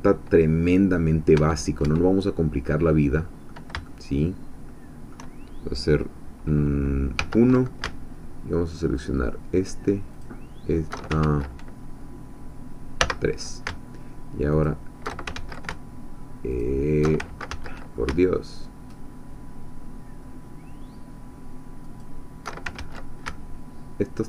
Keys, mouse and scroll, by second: 1.4 Tab, 2.7 middle click, 3.9-5.3 shift+middle drag, 7.2 1, 8.9 alt+shift+click, 10.2 alt+shift+click, 11.2 ctrl+alt+shift+z, 13.1 3, 14.5 alt+shift+click, 15.4 ctrl+alt+shift+z, 16.5 alt+shift+click, 17.5 ctrl+shift+z, 22.0 alt+shift+click, 22.7 z.